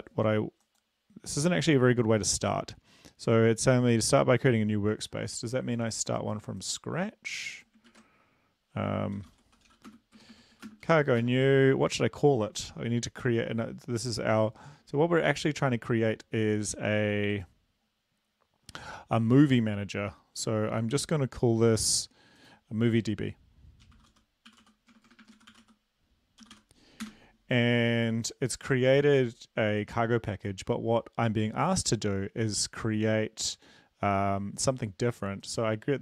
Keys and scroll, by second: 8.8 ctrl+`, 10.7-12.2 typing, 24.7-27.7 typing, 27.8 Return.